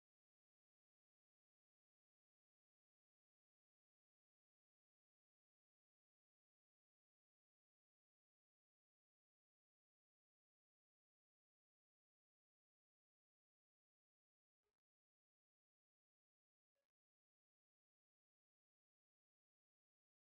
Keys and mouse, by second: 4.1 Delete, 10.1 shift+Tab, 17.8 shift+s.